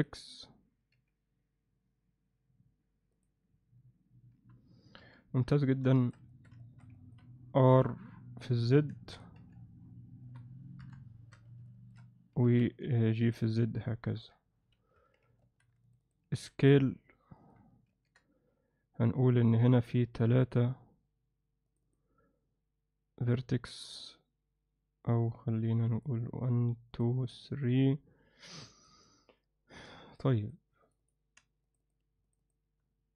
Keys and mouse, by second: 0.9 g, 5.0 KP_7, 5.9 alt+shift+middle drag, 6.3 ctrl+alt+middle click, 6.6 alt+shift+middle drag, 6.9 ctrl+alt+middle click, 7.7 r, 9.4 g, 11.6 KP_3, 11.7 alt+shift+middle click, 12.3 g, 14.1 KP_7, 14.9 Tab, 15.4 alt+shift+middle click, 15.8 click, 16.3 s, 17.9 ctrl+r, 25.9 click, 26.9 click, 27.3 click, 28.9 click, 29.8 2, 31.0 click, 31.7 shift+click, 32.4 shift+click.